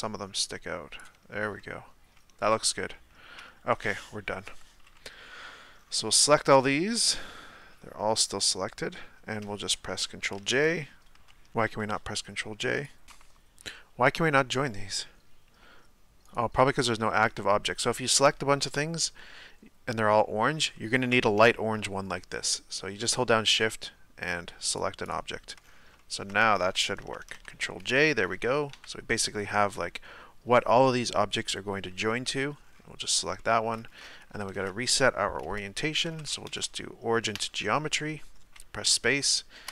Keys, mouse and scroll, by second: 1.6-3.4 middle drag, 3.4 Tab, 4.5 Tab, 5.1-5.7 middle drag, 5.7-6.2 scroll down 1, 6.2-7.1 middle drag, 7.1-7.6 scroll down 3, 7.6-11.5 middle drag, 11.5 right click, 13.0-16.5 middle drag, 16.5 shift+right click, 17.1-17.9 scroll up 4, 17.9-20.4 middle drag, 20.4-20.7 scroll up 2, 20.7-21.2 shift+middle drag, 21.3 scroll up 2, 21.5-23.5 shift+middle drag, 23.5 shift+right click, 25.1-25.6 shift+right drag, 25.6-26.0 scroll down 5, 26.0-26.5 shift+middle drag, 27.1 ctrl+j, 27.9 middle click, 28.7 KP_1, 32.6-33.4 scroll up 3, 33.4-33.8 shift+middle drag, 33.8 scroll down 1, 37.3 space.